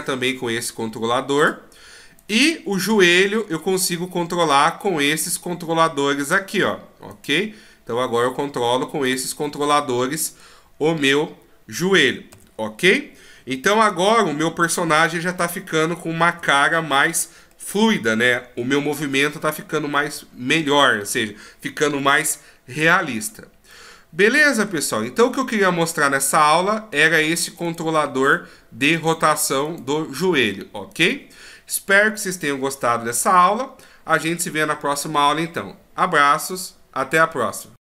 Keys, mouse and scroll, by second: 2.2 right click, 3.1 g, 7.1 right click, 7.4 g, 9.4 middle click, 12.0 a, 12.3 a, 14.7 alt+g, 15.7 alt+s, 16.2 alt+r, 16.7-17.5 scroll down 1, 17.5 middle click, 18.8-19.3 shift+scroll up 1, 19.3 middle click, 20.3-20.7 shift+scroll up 1, 23.7 middle click, 25.4 scroll up 1, 25.9-26.9 scroll down 1, 27.0 right click, 27.6 right click, 29.1 right click, 29.7 right click, 30.9 right click.